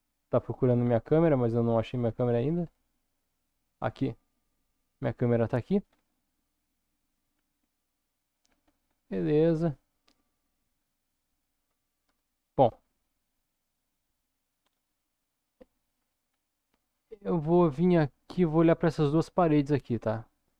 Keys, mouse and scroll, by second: 0.3 scroll up 1, 1.0-1.9 middle drag, 2.1-2.9 scroll down 3, 2.9-3.7 middle drag, 4.5-5.6 middle drag, 5.8-6.4 scroll up 2, 6.6 shift+middle click, 7.4 KP_0, 8.6-9.0 scroll up 2, 9.4-10.5 middle drag, 10.8 scroll up 1, 12.1 KP_0, 15.4 middle click, 16.2 scroll up 2, 17.3 middle click, 18.1-18.9 shift+middle drag, 19.2-19.7 middle drag, 20.0-20.5 shift+middle drag.